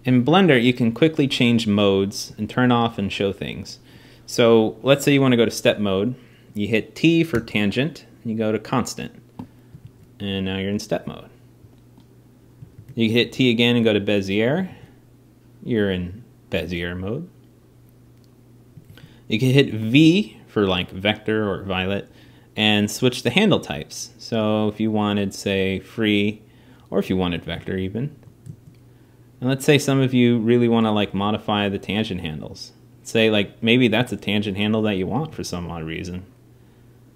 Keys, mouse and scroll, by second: 8.5 t, 13.0 alt+a, 13.8 t, 14.4 alt+a, 29.1-32.0 drag, 30.8 g, 34.7 click, 35.0 alt+a.